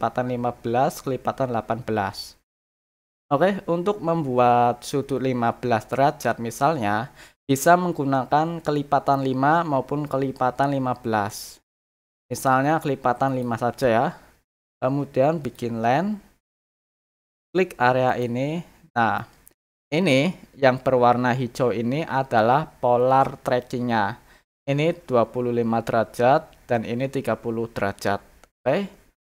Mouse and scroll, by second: 13.2 click, 15.4 click, 18.0 click, 19.1 middle click.